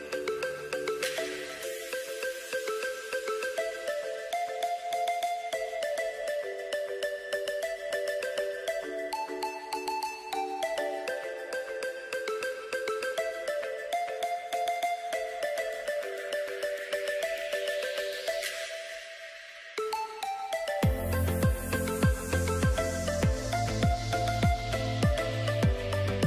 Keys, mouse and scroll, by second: 2.2 click, 9.3 click, 11.0 click, 15.8 click, 21.8 click, 24.4 click.